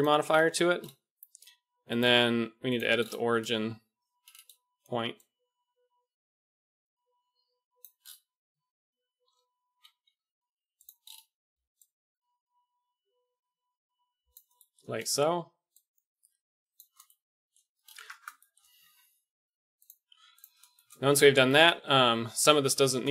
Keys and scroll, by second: 9.2 ., 10.0 g, 17.9 Tab, 18.8 Tab, 21.1 Tab, 22.1 Tab.